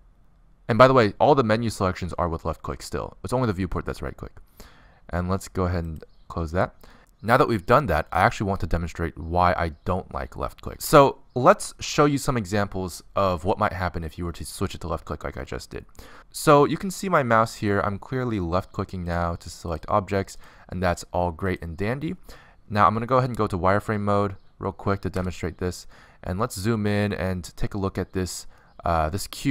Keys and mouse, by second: 18.8 click, 19.1-24.1 drag, 24.1 middle click, 25.7 z, 26.1 middle click, 27.2-29.0 middle drag.